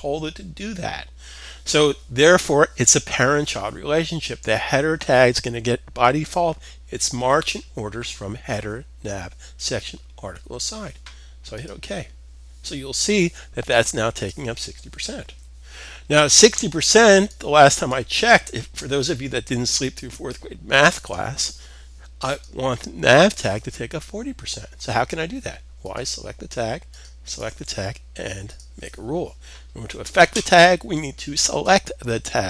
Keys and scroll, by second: 14.8 super+s.